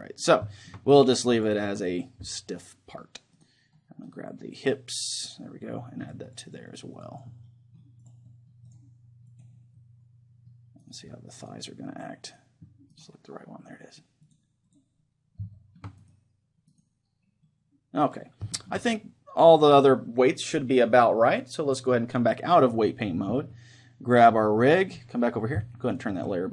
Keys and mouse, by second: 1.0-3.6 drag, 4.9-6.5 middle drag, 6.5-11.1 drag, 7.4-12.5 middle drag, 11.1-14.7 right drag, 13.7-20.7 middle drag, 14.3-16.6 drag, 16.3-18.3 right drag, 18.3-19.7 drag, 22.7-24.2 drag, 24.2-25.9 right drag, 25.9-26.5 drag.